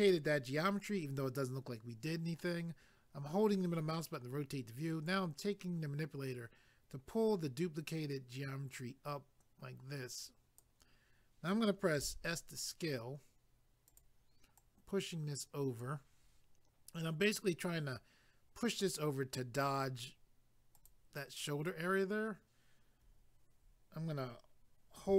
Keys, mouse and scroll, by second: 2.4 middle click, 5.0 click, 12.0 s, 13.9 click, 14.6 click, 20.8 click.